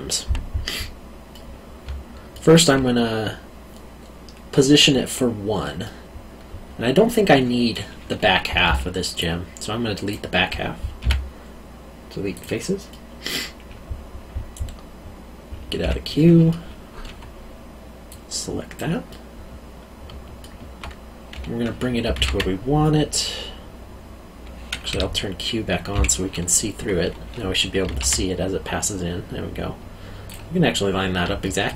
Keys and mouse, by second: 1.3 middle click, 1.8 alt+middle click, 5.8 middle click, 8.6 q, 9.2 click, 11.0 x, 12.3 click, 12.9 middle click, 15.8 o, 16.1 middle click, 18.1 click, 19.1 middle click, 20.0 alt+middle click, 22.0 g, 22.2 z, 24.9 Escape, 25.9 q, 27.8 g, 27.9 z, 30.2 click, 31.4 alt+middle click.